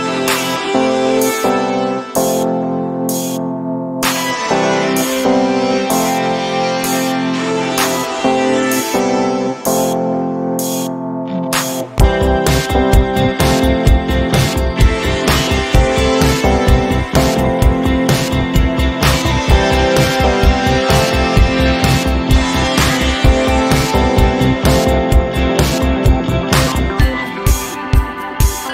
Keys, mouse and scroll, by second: 0.9 b, 3.4 click, 16.4 v, 17.6 click, 24.4 ctrl+scroll up 1, 25.7 click, 27.4 ctrl+z, 27.6-28.7 drag.